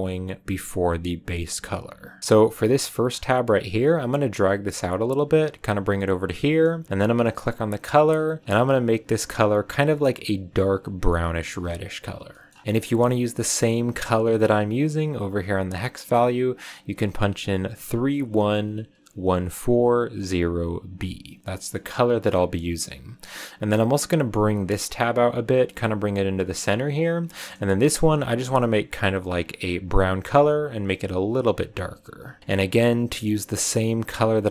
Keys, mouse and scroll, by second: 1.4 click, 2.2 scroll up 2, 2.7 click, 3.0-3.9 scroll up 2, 3.9-6.3 drag, 6.3-7.3 middle drag, 7.3 click, 8.3 scroll down 2, 8.4 click, 12.6 ctrl+v, 13.3 click, 21.7 middle click, 22.5 click, 23.6-26.7 drag, 27.2 scroll down 2, 27.2 middle click, 27.9 click, 32.4-34.5 middle drag.